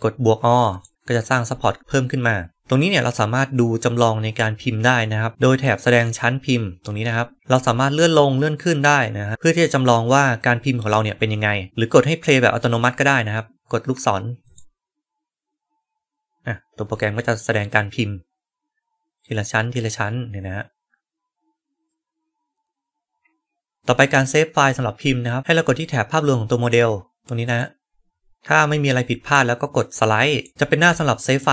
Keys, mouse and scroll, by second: 0.6 click, 0.9-4.3 right drag, 7.3 click, 8.0-11.7 drag, 14.3 click, 27.3 click, 28.3 right click, 30.2 right click, 31.3-31.5 right drag.